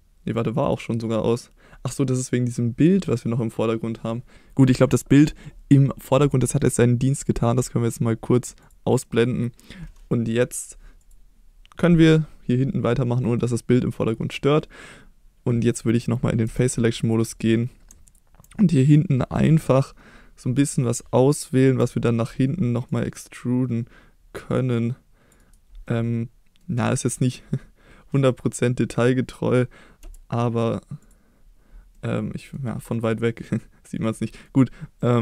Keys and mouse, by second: 0.6 click, 1.9-4.3 middle drag, 4.9 middle click, 8.6 click, 9.0 middle click, 11.0 click, 13.2 middle click, 16.5 3, 17.1-17.9 drag, 18.1 ctrl+click, 20.6 middle click, 21.8 c, 25.4 right click, 25.9-26.6 middle drag, 28.2-28.6 middle drag, 29.1 middle drag, 30.0 e, 31.0 click, 32.0 middle click, 32.9-34.5 middle drag, 35.0-35.2 middle drag.